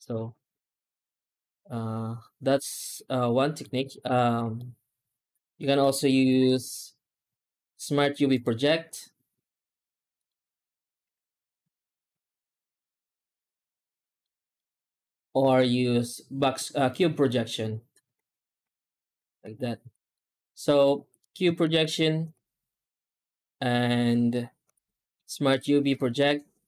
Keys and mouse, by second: 0.0 ctrl+z, 0.0 Tab, 0.0 ctrl+space, 3.1-3.4 middle drag, 3.7 ctrl+space, 4.0 Tab, 4.5-5.5 shift+middle drag, 6.0 u, 10.9 ctrl+space, 12.0 a, 13.1 middle click, 14.4 shift+middle click, 15.3 u, 17.9 alt+a, 18.6 a, 21.5 ctrl+space, 22.2 w, 24.5 u.